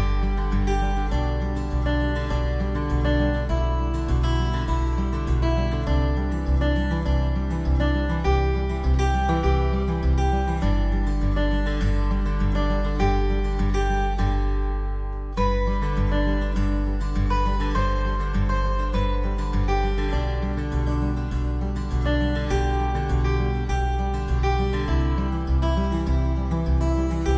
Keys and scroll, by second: 25.3 ctrl+alt+z.